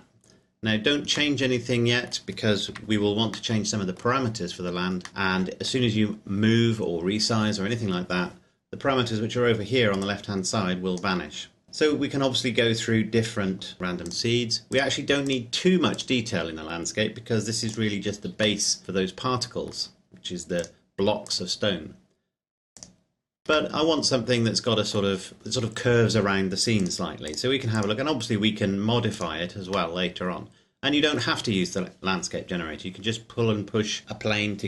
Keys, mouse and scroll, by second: 0.3-1.4 scroll up 1, 1.4 middle click, 2.6 KP_Decimal, 3.6 middle click, 10.0 click, 14.1 click, 18.7 middle click, 20.6 click, 23.8 middle click, 26.9 click, 29.9 middle click.